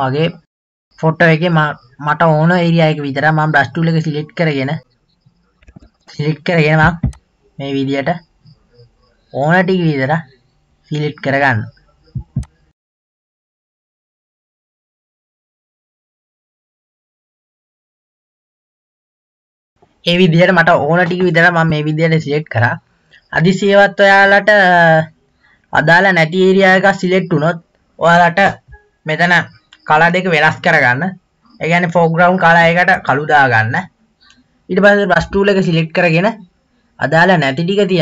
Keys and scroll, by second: 5.8 ctrl+z, 16.3 [, 16.3 [.